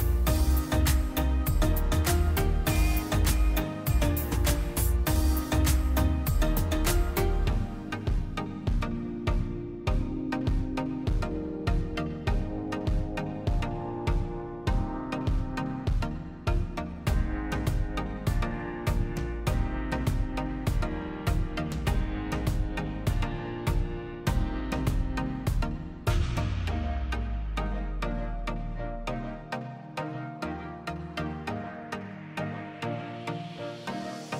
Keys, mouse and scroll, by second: 0.6 g, 4.9 i, 7.3 click, 8.2 click, 9.6 g, 13.4 i, 16.5 click, 21.7 click, 23.0 click, 24.0 click, 25.7 click, 28.3 click, 29.1 click, 32.5 ctrl+alt+KP_0.